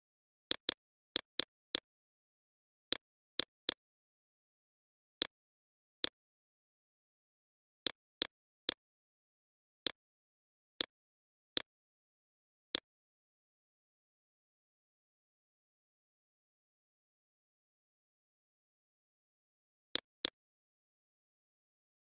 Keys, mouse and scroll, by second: 1.4-6.4 drag, 7.2 right click, 7.6 click, 13.1-16.3 drag, 16.3 right click, 16.8-21.4 drag, 21.9 click.